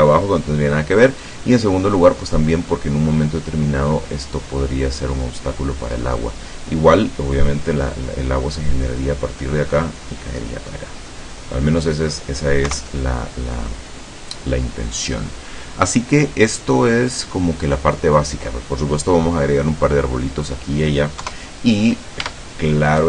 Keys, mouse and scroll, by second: 2.3-4.0 middle drag, 4.1-6.7 middle drag, 11.1-12.3 middle drag, 12.7 KP_0, 19.6-21.0 drag, 21.3 KP_0, 22.3 Tab, 22.9 right click.